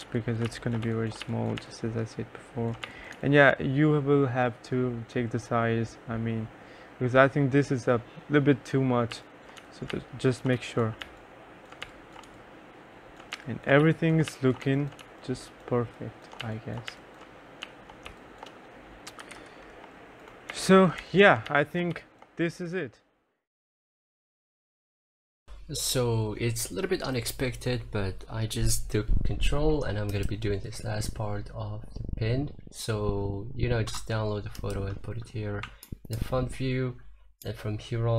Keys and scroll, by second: 0.0-3.3 typing, 9.0-22.6 typing.